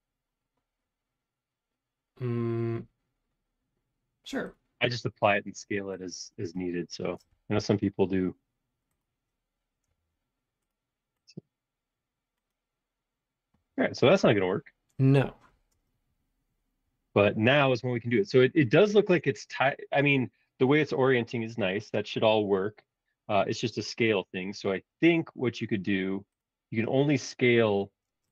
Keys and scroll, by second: 7.5 b, 27.8 space.